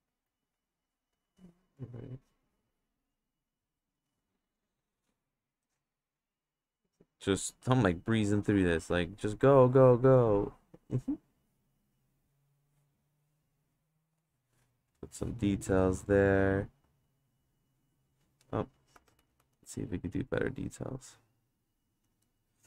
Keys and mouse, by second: 0.1 click, 1.2-2.3 drag, 3.0 click, 3.5 click, 4.6 click, 5.6-7.5 drag, 7.9 click, 8.3 click, 8.9 click, 10.2-11.4 drag, 12.6-13.7 drag, 14.2 click, 14.9 click, 15.5 click, 16.9 click, 17.8 click, 18.9 ctrl+z, 19.2 ctrl+z, 19.4 ctrl+z, 19.6 ctrl+z, 20.3-22.0 drag.